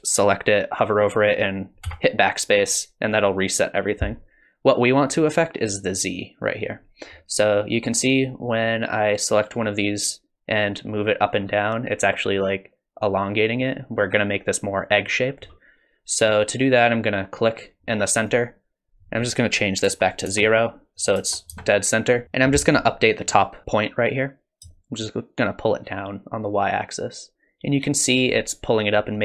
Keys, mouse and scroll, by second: 1.9 BackSpace, 5.1 click, 7.9 click, 10.1 click, 18.2 click, 19.2 click, 21.0 click, 24.7 shift+click.